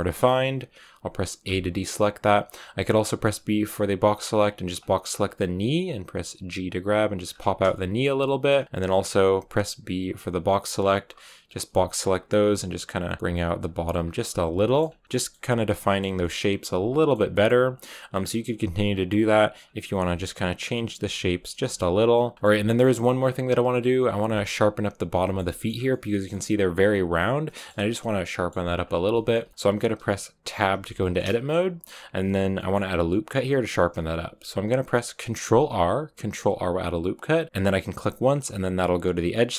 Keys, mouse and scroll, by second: 5.0 r, 5.6 b, 5.6 g, 7.6 shift+middle click, 8.0 scroll down 1, 8.1 shift+middle click, 8.6 a, 11.0 r, 12.1-14.2 typing, 14.1 scroll down 2, 14.5 shift+middle click, 15.0-17.4 shift+middle drag, 17.4-19.5 scroll up 5, 19.5 b, 19.9 r, 20.0 g, 21.1 z, 21.6 shift+middle click, 21.7-22.0 scroll down 4, 22.0-23.9 middle drag, 23.9 right click, 24.2 shift+middle click, 24.3-25.1 scroll up 4, 25.1 shift+middle click, 25.6 scroll up 2, 25.8-28.7 middle drag, 28.7-29.0 scroll down 3, 29.0-30.4 shift+middle drag, 30.4 Tab, 30.9 shift+middle click, 31.5 a, 31.5-32.4 scroll up 2, 32.4 middle click, 32.7-35.4 scroll up 2, 35.4 ctrl+r.